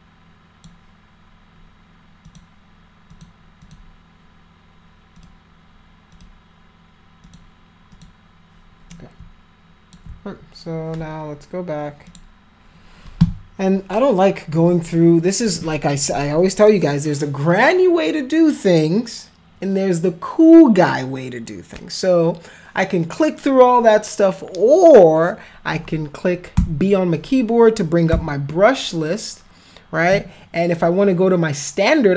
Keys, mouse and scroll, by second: 2.2 click, 3.1 click, 3.6 click, 5.1 click, 6.1 click, 7.2 click, 7.9 click, 8.9-9.9 shift+drag, 12.1 click, 26.5 b, 28.1 b.